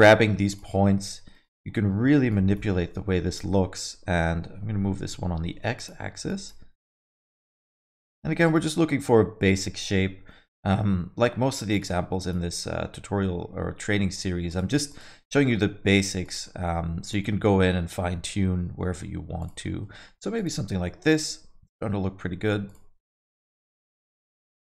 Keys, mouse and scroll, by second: 0.7 middle click, 1.4 click, 1.7 middle click, 2.3 click, 3.2 g, 6.3 click, 7.1 g, 8.4 click, 10.2 g, 12.2 click, 12.9 g, 14.9 click, 15.6 g, 16.5 middle click, 17.1 click, 17.9 g, 19.6 middle click, 19.9 middle click, 20.3 click, 21.2 g, 23.0 click, 23.6 g, 24.4 middle click.